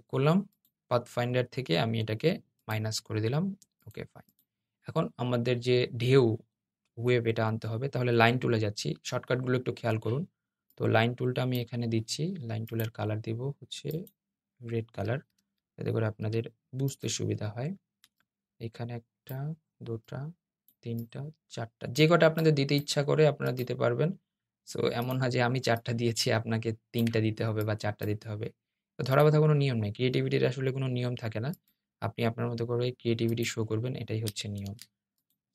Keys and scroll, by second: 5.8 \, 34.3 super+z.